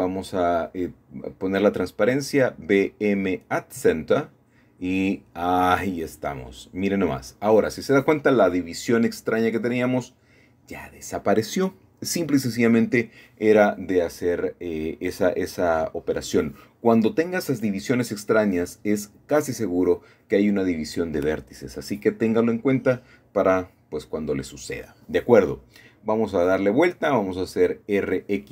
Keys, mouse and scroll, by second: 0.8-2.2 drag, 2.4 m, 3.1 click, 5.8 click, 7.1-8.0 scroll down 2, 8.0-10.2 middle drag, 11.7 3, 13.0 c, 13.4-14.5 drag, 14.6 Escape, 16.0-16.7 scroll down 3, 16.7 scroll up 2, 16.7-17.6 scroll down 2, 17.6 middle click, 18.7 middle click, 19.6 middle click, 21.1 scroll down 2, 21.4-21.9 scroll up 2, 22.1 shift+middle click, 23.7-25.3 typing, 26.1 Return, 27.2-28.0 scroll down 3, 27.3 middle click, 28.0 scroll up 1, 28.1-28.5 scroll down 1.